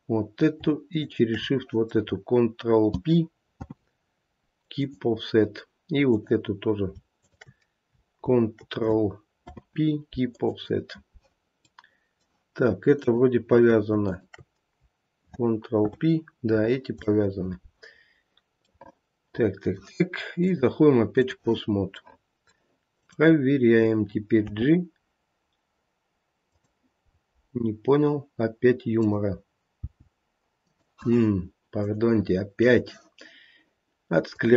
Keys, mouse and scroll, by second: 1.0 shift+click, 3.6 ctrl+p, 6.0 click, 7.2 shift+click, 9.4 ctrl+p, 11.6 middle click, 13.0 click, 14.1 shift+click, 15.7 ctrl+p, 17.0 click, 18.0 scroll down 2, 18.7 middle click, 20.4 click, 22.0 middle click, 22.4 middle click, 23.0 click, 24.4 g, 27.1 scroll up 2, 28.9 click, 29.8 g, 31.7 click, 34.3 click.